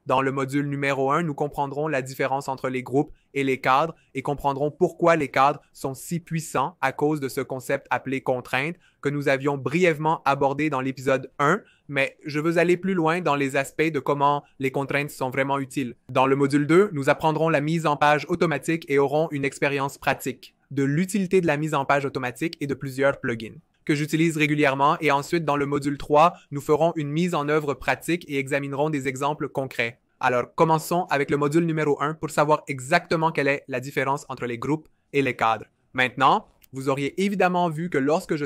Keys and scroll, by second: 29.1 typing, 36.3 typing.